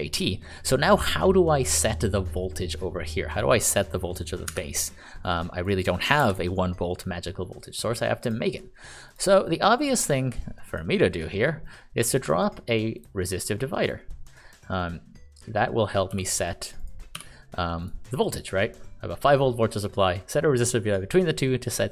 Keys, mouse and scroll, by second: 4.4 Delete, 5.2 click, 6.2 Delete, 9.1 click, 13.8 click, 16.1 h, 17.1 h, 17.8 click.